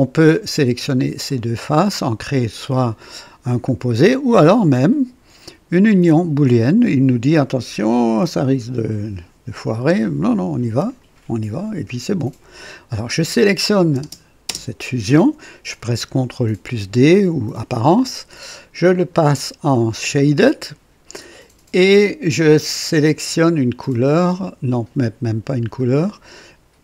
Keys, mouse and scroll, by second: 0.5 click, 1.3 ctrl+click, 5.8 click, 10.8 click, 13.0 click, 14.0 space, 14.4 space, 17.0 ctrl+d, 18.9 click, 19.9 click, 23.9 click, 25.5 Escape, 26.0 click.